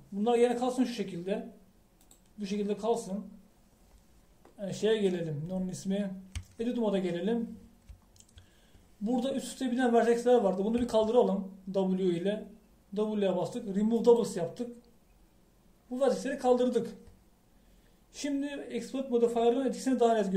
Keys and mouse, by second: 7.4 Tab, 11.9 w.